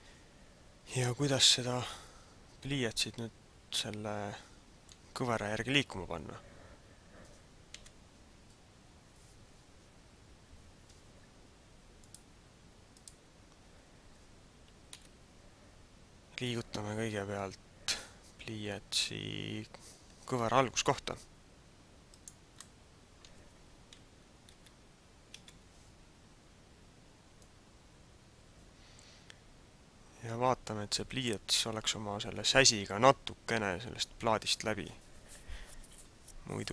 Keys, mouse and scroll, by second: 1.3 middle click, 8.0 KP_7, 8.8-9.3 scroll down 1, 10.1-10.5 scroll up 1, 12.1 click, 14.8 KP_5, 20.5 g, 22.3 click, 22.5 middle click, 24.5 KP_3, 25.3 KP_1, 27.3 click.